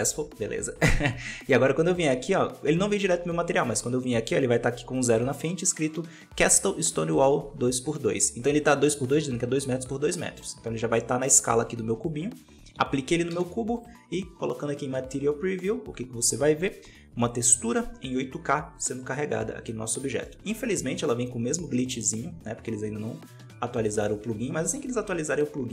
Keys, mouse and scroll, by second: 4.4-10.3 drag, 13.8 z, 18.9-20.2 middle drag, 20.2 scroll up 4, 22.0-25.7 drag.